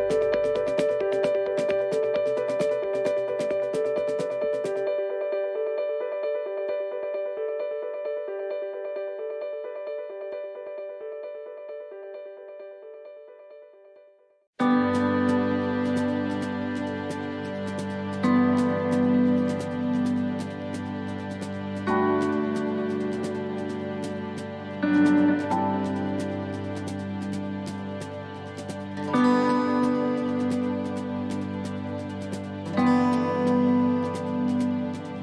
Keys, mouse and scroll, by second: 0.9 scroll up 1, 1.7 click, 5.2 click, 6.3 middle click, 7.5 middle click, 8.1 scroll down 1, 8.4 middle click, 13.0 middle click, 13.0-13.7 scroll down 1, 13.7 shift+middle click, 14.1 scroll up 2, 14.4 middle click, 14.8 scroll down 1, 15.2 middle click, 15.9 middle click, 17.2 shift+middle click, 17.9-18.2 scroll up 1, 19.5 middle click, 20.7 shift+middle click, 21.5 middle click, 22.4 scroll down 1, 22.8 middle click, 24.0 right click, 24.7 shift+right click, 26.2 click, 28.9 middle click, 30.4 click, 32.5 middle click, 32.9-33.2 scroll down 1, 33.2 middle click, 33.6-34.0 scroll up 3, 34.0 shift+middle click, 34.9 right click.